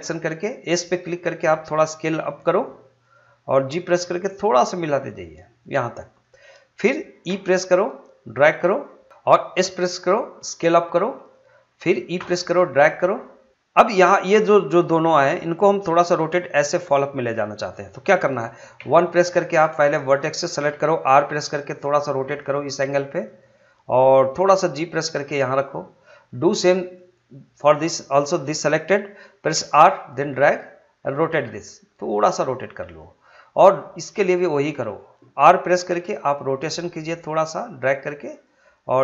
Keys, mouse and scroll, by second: 3.0 click, 3.7 g, 6.1 click, 7.3 e, 9.1 click, 9.6 s, 11.2 click, 12.1 e, 13.5 click, 18.7 1, 19.5-21.1 drag, 21.1 r, 23.2 click, 24.4 g, 25.6-29.5 drag, 29.5 r, 32.8-35.9 drag, 35.9 r, 38.4 click.